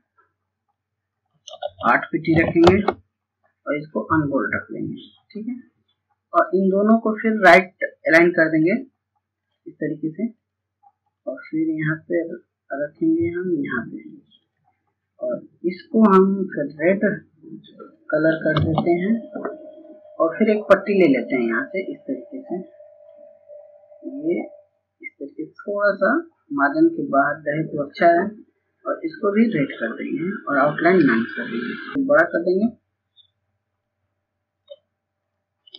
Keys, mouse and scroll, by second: 0.0 click, 1.6 KP_8, 3.6-16.8 drag, 18.1 ctrl+space, 18.5-27.5 drag, 30.7 right click, 33.4 shift+click.